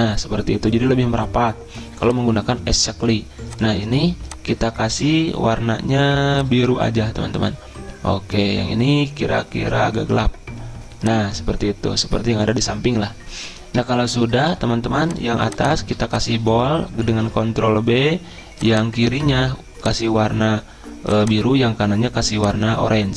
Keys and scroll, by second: 0.4-1.1 typing, 17.0 ctrl+b.